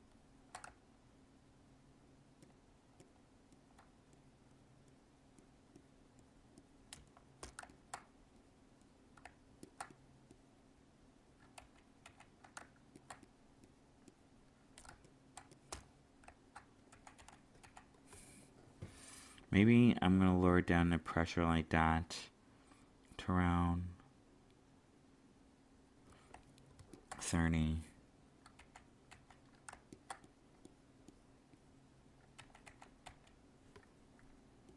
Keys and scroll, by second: 11.5 ctrl+z, 14.8 alt+space, 16.9 ctrl+z, 28.5 ctrl+z, 32.4 ctrl+z.